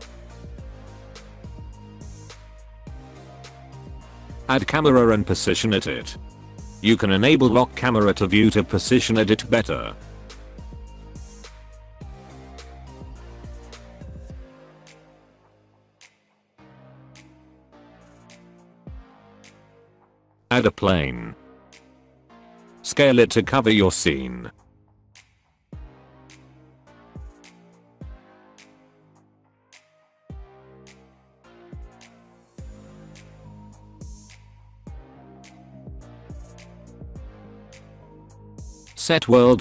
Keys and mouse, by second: 0.7 alt+a, 1.2 middle click, 1.9 middle click, 3.3 shift+a, 7.5 KP_0, 8.1 n, 8.4 click, 8.7 click, 9.3 shift+middle click, 9.5 shift+middle click, 9.7 shift+middle drag, 10.3 middle click, 11.3 shift+middle click, 11.6 q, 11.8 click, 12.0 click, 12.8 n, 13.7 click, 14.0 click, 15.3 g, 16.1 g, 16.4 g, 17.5 middle click, 17.7 middle click, 18.2 g, 18.7-20.6 shift+middle drag, 19.0 shift+a, 21.1 s, 24.9 KP_0, 28.0 click, 28.2 alt+click, 28.5 r, 28.7 g, 29.0 alt+click, 29.2 KP_0, 29.5 g, 30.3 middle drag, 30.7 middle drag, 31.2 alt+a, 31.3 middle drag, 31.6 KP_0, 32.0 n, 32.4 n, 32.8 shift+middle click, 33.1 middle click, 33.4 shift+middle click, 33.6 shift+middle click, 33.8-34.7 shift+middle drag, 35.0 shift+middle click, 35.4 n, 35.6 click, 35.7 n, 35.9 middle drag, 36.2 middle click, 36.5 middle click, 36.8 KP_0, 37.0 z, 38.6 click.